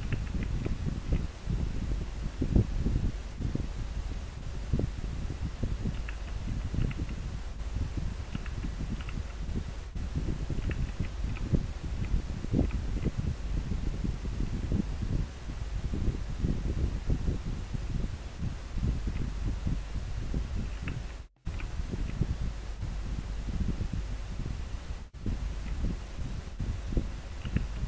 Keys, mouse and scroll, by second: 0.4 scroll down 1, 11.0 scroll down 1, 12.5 scroll down 1, 13.1 scroll up 1, 15.0 scroll down 1, 21.7 scroll down 1, 22.8 scroll up 1.